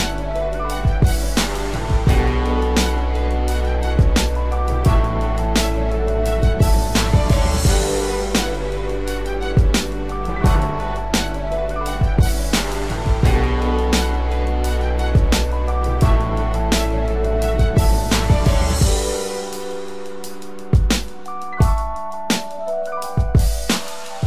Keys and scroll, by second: 11.0 ctrl+=, 11.7 ctrl+space, 11.9 ctrl+=, 13.1 ctrl+=, 16.7 ctrl+z.